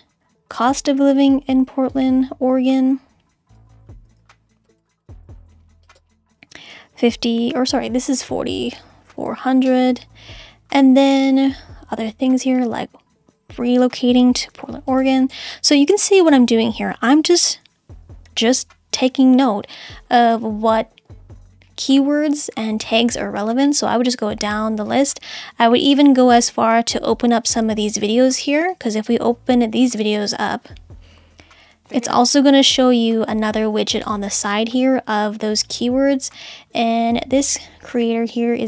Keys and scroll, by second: 4.3 super+c, 5.3 super+v, 7.1 4, 8.6-9.6 typing, 14.5 super+c, 15.5 super+v, 17.3 5, 17.9 4, 18.2 0.